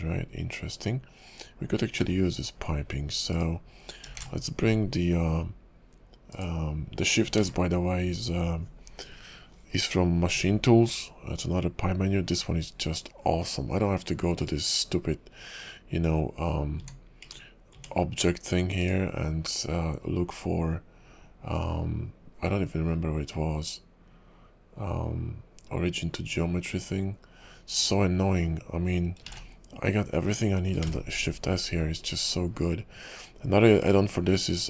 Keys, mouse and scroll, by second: 0.7-1.9 scroll down 1, 1.9 s, 4.1 shift+s, 7.4 shift+s, 16.8 Tab, 17.2 Tab, 17.7 Tab, 18.8 click, 29.4 shift+a, 30.8 shift+s, 34.3-34.6 scroll down 5.